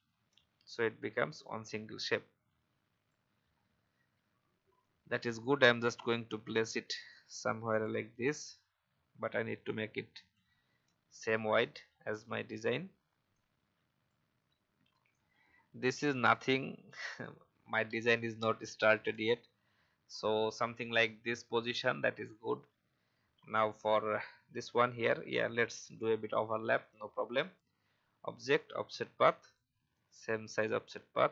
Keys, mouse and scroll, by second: 0.3 alt+scroll down 1, 1.5-3.3 drag, 3.4-4.0 alt+scroll up 1, 4.8-7.8 shift+drag, 8.4-9.0 alt+scroll up 1, 9.7 shift+click, 10.8-11.2 alt+scroll down 1, 11.9 alt+scroll up 1, 13.3 shift+click, 15.1-16.3 shift+drag, 17.9 Up, 18.1 Up, 18.2 Up, 19.3 alt+scroll down 1, 20.2-21.2 scroll up 1, 21.2-22.2 scroll down 1, 22.5 alt+scroll down 1, 24.1 Up, 26.7 click.